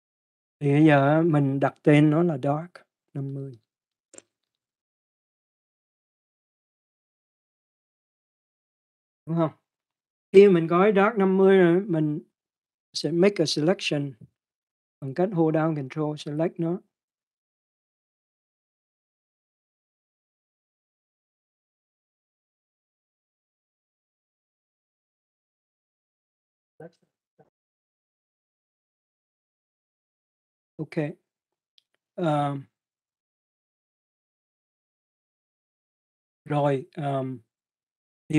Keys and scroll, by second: 3.7-5.7 typing, 7.1-7.9 typing, 8.7 Return.